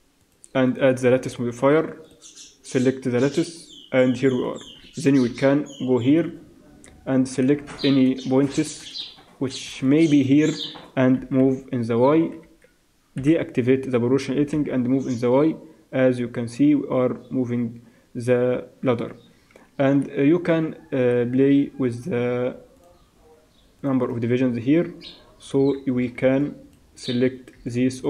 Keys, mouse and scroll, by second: 4.4-5.3 drag, 4.4-5.3 right drag, 5.3 KP_3, 6.0 click, 6.5 Tab, 7.4 a, 8.0 alt+a, 8.8 a, 9.7 b, 11.2 g, 13.2 o, 14.4 g, 21.3 Tab, 22.8-24.5 drag, 24.7 Tab, 26.2 b, 26.7-28.0 middle drag, 27.5 b.